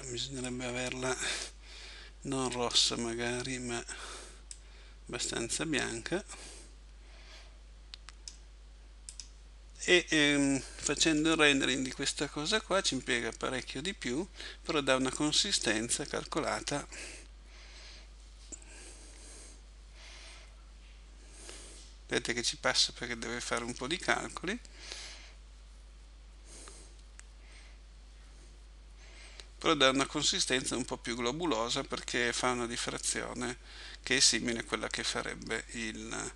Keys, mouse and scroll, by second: 0.5 click.